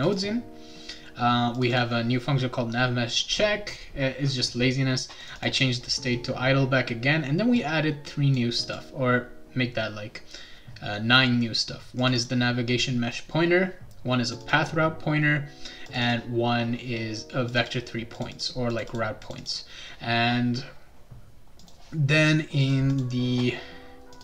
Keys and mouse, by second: 0.0 click, 1.5 click, 1.7 click, 5.2 click, 5.4 click, 7.6 click, 8.6 click, 12.0 click, 12.1 click, 14.3 click, 14.4 click, 15.9 click, 16.0 click, 17.5 click, 17.6 click, 18.1 click, 18.3 click, 18.7 click, 18.9 click, 19.2 click, 19.4 click, 21.6 click, 22.6 click, 22.9 click, 24.1 click.